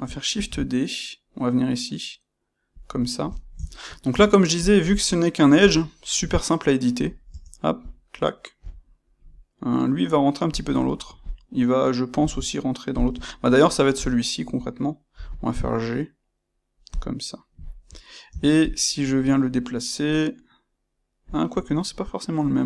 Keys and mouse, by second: 0.3 shift+d, 2.7 click, 3.0-4.5 shift+middle drag, 4.0 Tab, 4.5 click, 5.6 g, 6.9 click, 7.2 Tab, 7.7 click, 8.6 g, 10.5 click, 11.1 click, 12.1 g, 12.9 click, 13.2-16.9 shift+middle drag, 15.0 g, 16.9 click, 17.6-18.6 shift+middle drag, 18.2 Tab, 18.6 click.